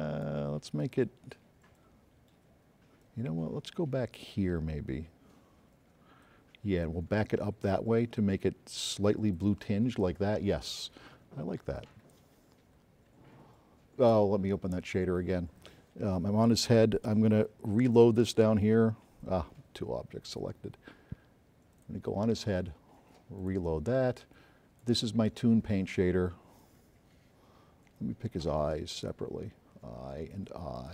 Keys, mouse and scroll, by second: 9.0 click, 11.8 click, 18.0 click, 20.1 scroll up 1, 21.9 click, 23.4 click, 23.7 click, 24.7 click, 25.9-26.9 scroll up 3, 29.0 shift+click, 30.8 shift+click.